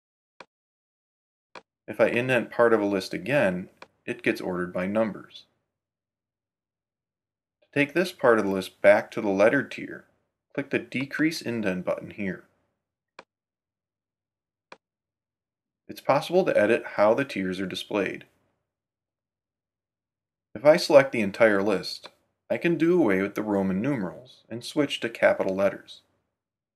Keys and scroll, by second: 0.1 Tab, 3.4 Tab, 14.5 Right, 14.7 Tab.